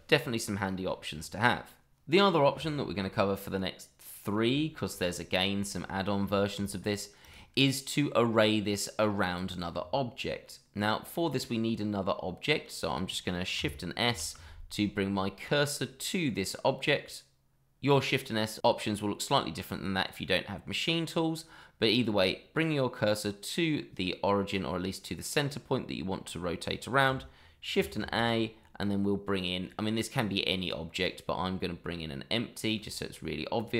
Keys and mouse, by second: 2.6-2.9 shift+middle drag, 4.0-4.3 middle drag, 4.6-4.9 shift+middle drag, 5.6 shift+middle drag, 6.3 shift+middle drag, 7.2 click, 7.9-9.6 middle drag, 11.1-12.5 middle drag, 14.0 shift+s, 23.7 middle drag, 27.7 shift+a, 33.5 click.